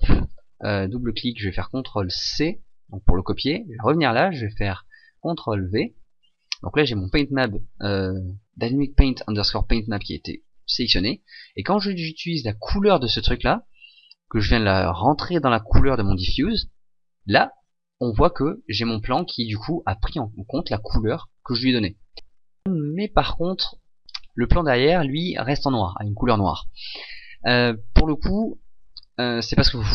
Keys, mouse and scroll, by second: 22.1 ctrl+z.